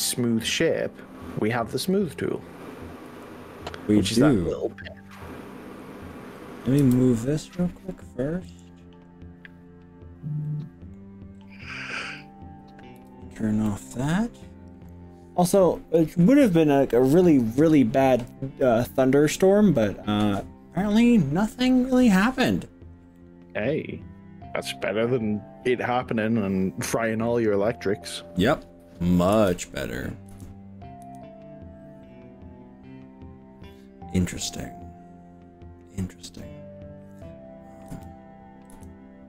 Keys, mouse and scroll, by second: 1.5 click, 1.9 click, 2.4 click, 3.1 s, 5.1 click, 5.9 click, 6.8 g, 8.5 click, 10.4 middle click, 10.9 click, 11.3-11.9 scroll down 4, 13.0 o, 13.7-16.1 middle drag, 23.2-26.6 middle drag, 27.3 click, 27.7 middle click, 29.3 KP_3, 30.3 KP_1, 31.1 KP_2, 37.9 KP_1, 38.3 KP_3, 38.7 KP_1.